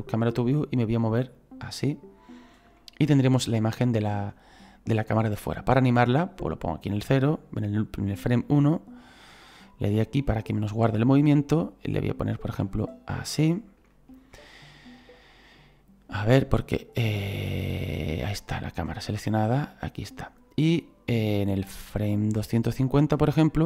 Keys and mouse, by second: 2.8 shift+middle click, 10.5 click, 11.3 shift+middle click, 12.6 middle click, 13.8 shift+middle click, 18.2 click, 19.6 middle click, 21.1 click.